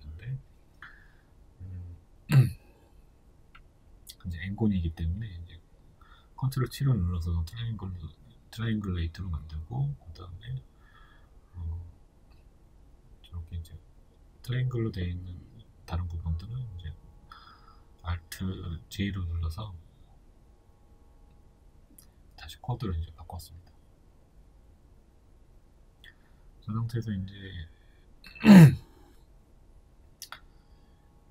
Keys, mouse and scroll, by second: 1.0 ctrl+t, 6.3 alt+j, 7.4 right click, 7.9-12.0 middle drag, 11.8 3, 12.0 right click, 12.3 shift+right click, 13.3 alt+j, 14.1 right click, 14.3 shift+right click, 15.0 alt+j, 15.6-17.1 middle drag, 17.1 right click, 17.4 shift+right click, 18.2 alt+j, 18.8 middle click, 19.3 shift+right click, 19.5 shift+right click, 20.2 alt+j, 21.1 right click, 21.4 shift+right click, 22.4 alt+j, 23.2-31.3 middle drag, 28.6 Tab.